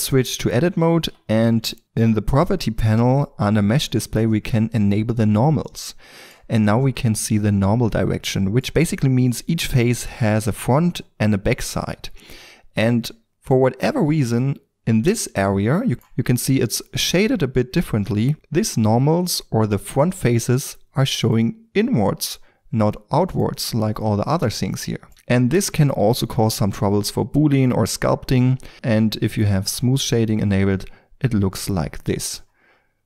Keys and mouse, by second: 1.0 n, 4.9-6.8 drag, 6.8-9.1 middle drag, 13.1 middle click, 14.2-16.8 middle drag, 16.8-18.2 middle drag, 18.9-20.7 middle drag, 22.5-23.2 middle drag, 23.3 middle click, 23.8-25.1 middle drag, 28.7 Tab, 30.4 click, 30.9-32.1 middle drag.